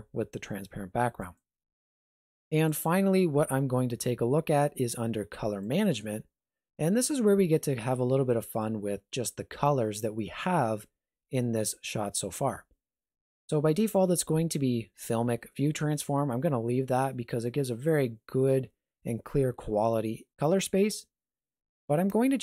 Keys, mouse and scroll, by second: 1.3 click, 2.7 click, 5.6 click, 7.0 middle click.